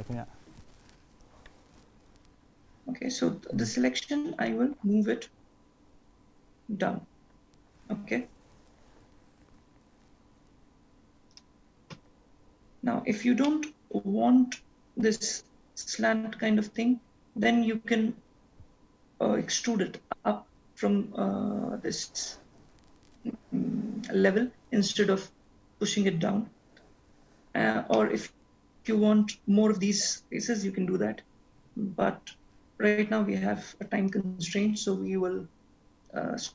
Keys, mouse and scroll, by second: 12.4 scroll down 2, 12.7 scroll up 2, 13.6 middle click, 28.2 middle click, 31.1-32.1 scroll down 2, 32.1 scroll up 2, 32.7-33.3 scroll up 1, 33.3-35.0 scroll down 1, 35.8-36.5 scroll down 1.